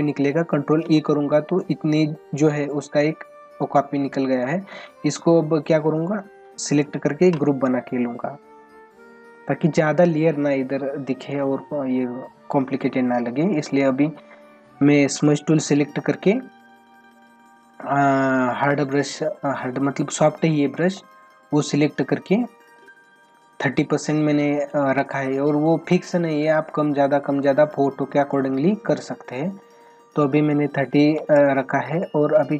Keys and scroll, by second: 19.0 ctrl+=, 20.7 space, 22.1 ctrl+=, 29.2 space, 31.8 ctrl+-.